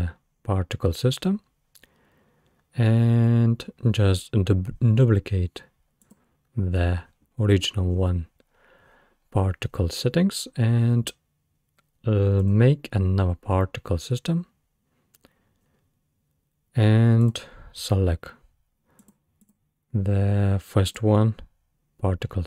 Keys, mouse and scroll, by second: 6.1-9.1 drag, 12.4-15.4 drag, 19.0 click, 19.4 click, 20.9 click.